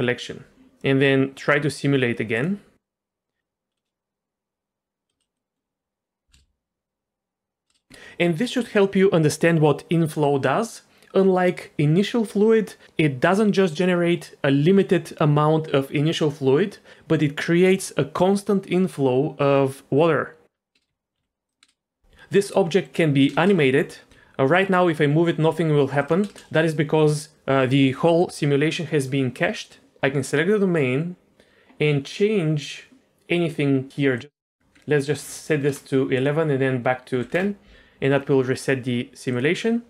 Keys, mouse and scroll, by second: 0.5 click, 2.3 click, 5.1 space, 5.3 middle drag, 6.3 space, 7.7 space, 20.7 space, 20.9 f, 21.1 g, 21.6 space, 22.4-22.9 middle drag, 23.3 space, 23.6 f, 24.1 g, 26.3 space, 30.2 click, 34.2 click, 34.6-35.8 drag, 35.2 KP_1, 36.1-37.3 drag, 39.3 click.